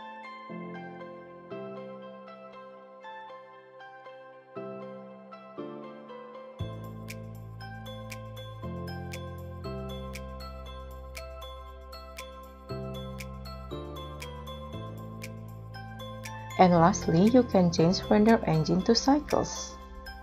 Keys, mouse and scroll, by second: 2.7 scroll down 13, 7.4 r, 11.0-11.5 scroll up 7, 11.5-13.3 typing, 11.7 scroll up 3, 16.2 scroll up 4.